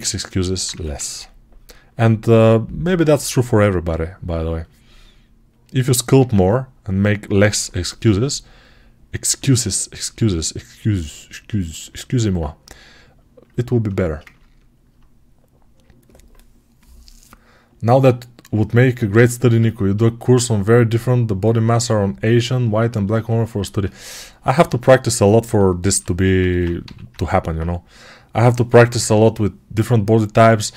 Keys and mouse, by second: 0.6 1, 6.1 alt+q, 7.9 g, 13.4-25.1 alt+right drag, 25.7 alt+q, 26.7 g, 28.6 [, 28.7 [.